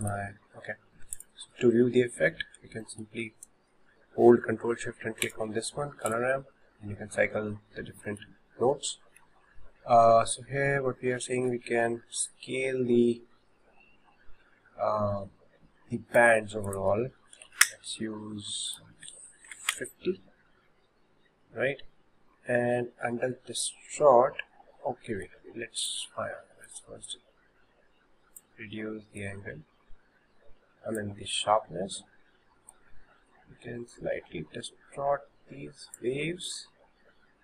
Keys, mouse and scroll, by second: 0.0 click, 1.2 ctrl+shift+click, 2.9-5.3 shift+middle drag, 5.3 ctrl+shift+click, 6.1 ctrl+shift+click, 8.1-11.0 shift+middle drag, 11.0 scroll up 3, 11.4 shift+middle click, 12.3-15.3 drag, 16.7-21.6 drag, 21.6 scroll up 1, 24.1-32.3 drag, 32.7-35.8 drag, 36.8-37.4 scroll up 1.